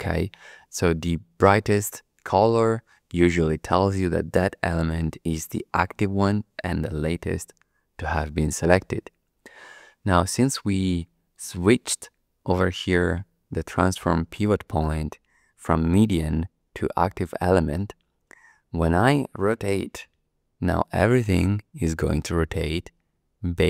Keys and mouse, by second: 11.3-17.3 drag, 20.1 r.